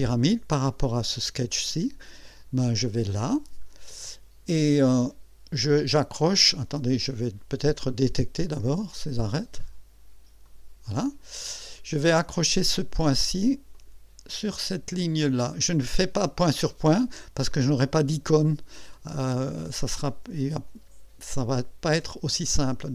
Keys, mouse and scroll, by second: 2.6 click, 3.6 scroll up 1, 7.9 click, 9.0 click, 10.4 click, 11.4 click, 12.2 right click, 13.7 click.